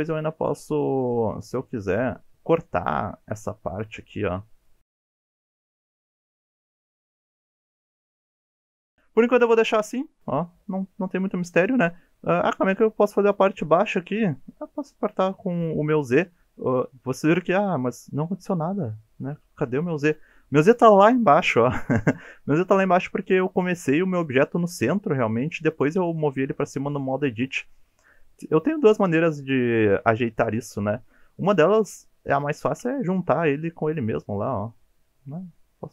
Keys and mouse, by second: 0.7 g, 1.0 click, 4.8 click, 4.9-8.2 typing, 5.2 drag, 5.3 click, 5.6 click, 5.9 click, 6.3 click, 6.7 click, 7.2 click, 7.4 click, 7.8 shift+middle click, 8.0 click, 9.1-9.8 middle drag, 10.0 alt+z, 10.3-11.8 middle drag, 14.8 click, 17.1-19.9 middle drag, 26.0 a, 32.7 g, 32.8 z.